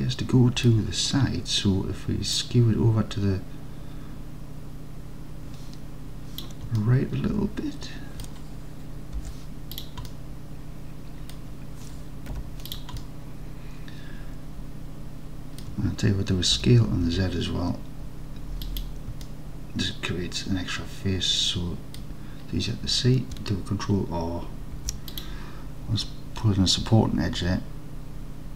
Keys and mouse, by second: 2.4-6.7 drag, 6.8-8.3 alt+drag, 9.2 2, 10.1-11.4 alt+drag, 12.4 3, 13.1-15.7 alt+drag, 16.7 s, 17.1 z, 18.7 click, 19.3-22.0 alt+drag, 24.8 ctrl+r.